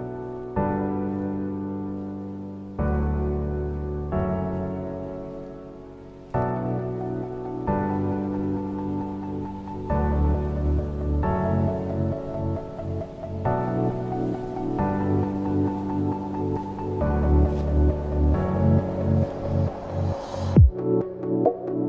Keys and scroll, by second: 2.5 l, 3.1 v, 3.7 ctrl+z, 4.7 shift+m, 5.9 ctrl+z, 8.5 ctrl+z, 9.9 ctrl+z, 11.1 v, 11.2 a, 14.0 v, 15.4 ctrl+a, 16.0 shift+m, 19.1 v, 21.0 m, 21.5 ctrl+'.